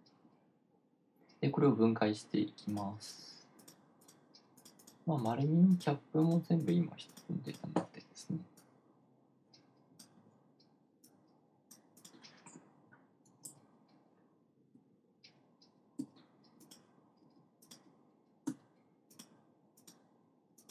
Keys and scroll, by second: 15.2 BackSpace, 16.4 c, 19.0 c.